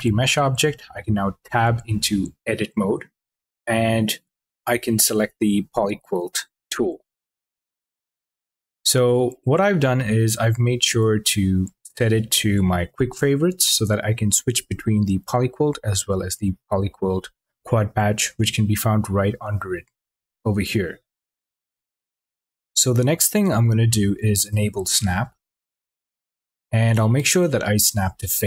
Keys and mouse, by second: 1.2 Tab, 7.9 click, 10.4 q, 25.3 shift+Tab, 26.5-28.4 drag.